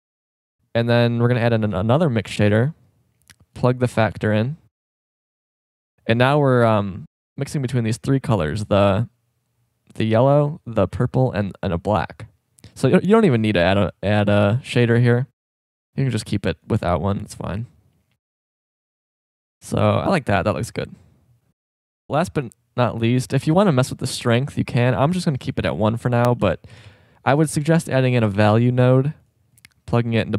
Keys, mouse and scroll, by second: 0.2-1.8 drag, 1.6 shift+d, 2.7 click, 3.6-4.2 right drag, 6.8-7.3 drag, 11.9-13.1 drag, 16.6-18.6 drag, 20.7 middle click, 22.0-23.8 middle drag, 25.3 shift+a, 27.5 BackSpace, 27.6 BackSpace, 30.1-30.3 drag.